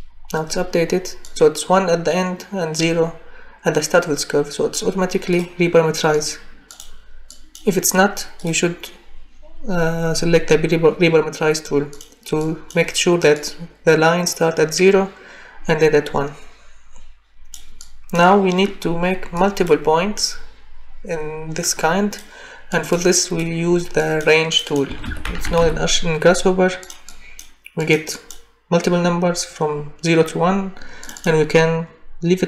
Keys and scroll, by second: 24.9-25.6 typing.